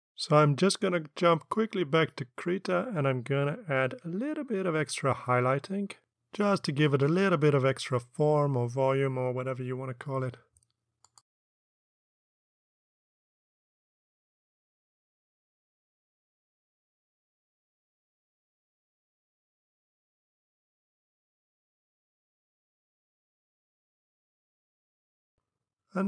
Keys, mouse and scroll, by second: 1.0 alt+Tab, 2.3 alt+Tab, 8.0 click, 9.1 click, 10.7 click, 11.9 ctrl+click, 12.2 ctrl+click, 12.5 click, 13.1 click, 13.7 click, 14.0 click, 14.1 click, 14.3 click, 14.6 ctrl+z, 14.7 ctrl+click, 15.0 click, 15.3 click, 15.5 click, 15.8 click, 16.0 click, 16.4 click, 16.6 ctrl+z, 16.7 ctrl+click, 17.1 click, 17.2 click, 17.4 click, 17.6 click, 18.3 click, 19.1 click, 19.6 click, 19.8 click, 20.0 click, 20.3 click, 21.0 click, 21.5 click, 21.9 click, 22.2 click, 22.6 click, 22.7 click, 22.9 click, 23.5 click, 24.8 click.